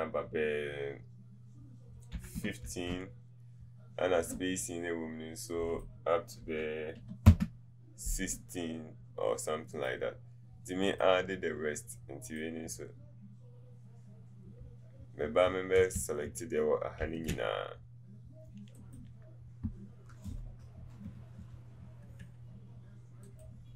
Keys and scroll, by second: 2.2 KP_1, 2.4 KP_5, 2.7 Return, 16.0 ctrl+a, 16.3 ctrl+a.